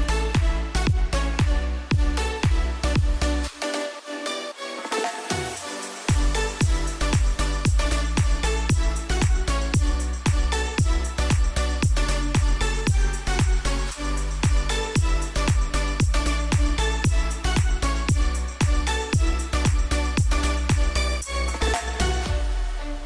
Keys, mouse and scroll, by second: 0.2-0.8 typing, 2.7-3.5 typing, 4.9-9.8 drag, 9.8 Right, 13.4 ctrl+t, 14.4-20.0 drag, 21.9 ctrl+t.